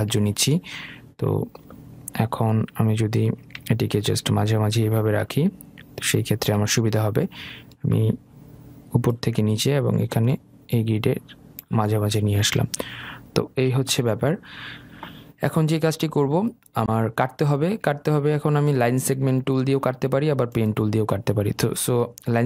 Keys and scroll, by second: 2.8 Left, 3.8 Right, 4.5 Down.